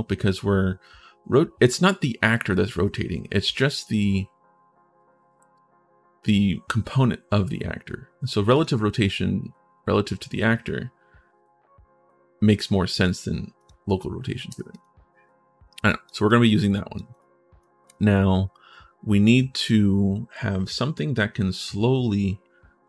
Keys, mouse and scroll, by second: 8.3 click, 13.3 click, 14.5 click, 15.6 click, 16.1 click, 16.9 click, 17.4-19.1 drag, 19.3 click.